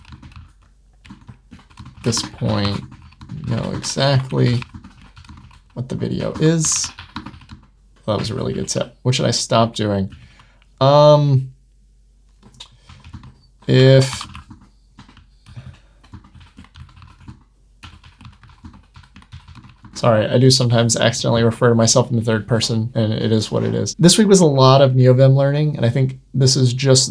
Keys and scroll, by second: 7.9 Escape, 10.1 Right, 15.3 Right.